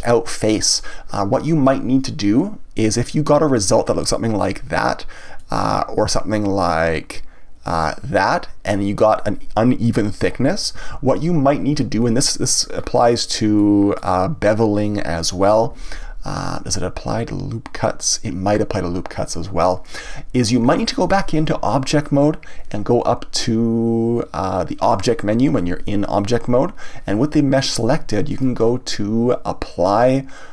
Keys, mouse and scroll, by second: 3.6-5.4 drag, 5.4-6.6 middle drag, 6.6-9.6 drag, 10.9 ctrl+z, 12.8-13.6 scroll down 2, 13.6-15.7 middle drag, 15.7 ctrl+z, 21.1 Tab, 22.0-25.2 scroll down 1, 28.3-30.5 drag.